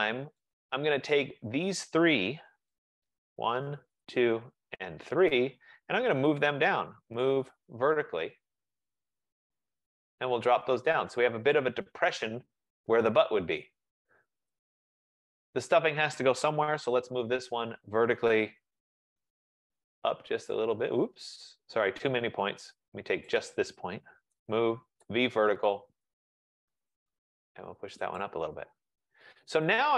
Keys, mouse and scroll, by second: 0.4 right click, 2.9 shift+click, 4.1 shift+right click, 5.4 right click, 7.0-7.7 typing, 9.4 shift+click, 11.6 click, 15.3 shift+click, 16.5-16.9 typing, 17.9-18.7 typing, 19.9 click, 21.2-22.0 typing, 22.0 Escape, 23.5 click, 24.4-25.7 typing, 26.4 click, 28.3 click, 29.3-29.9 typing, 29.8 click.